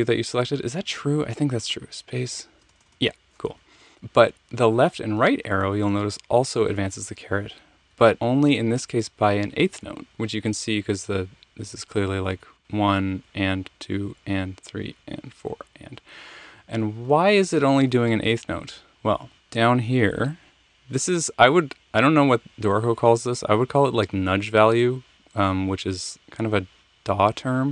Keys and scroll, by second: 2.3-6.0 typing, 4.5 Right, 5.0 Left, 7.3 Left, 7.8 Right, 8.2 Left, 8.7 Right, 9.0 Left, 9.2 Right, 9.6 Left, 9.8 Right, 16.6 Right, 16.8 Right, 16.9 Right, 17.1 Left, 17.3 Left, 17.4 Left, 17.6 Right, 17.7 Right.